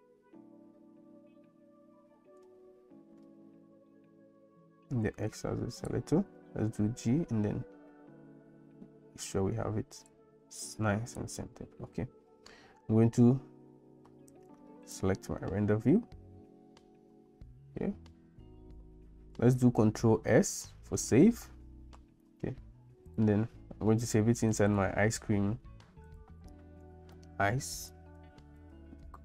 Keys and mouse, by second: 6.6 g, 15.6-16.7 drag, 20.4 ctrl+s.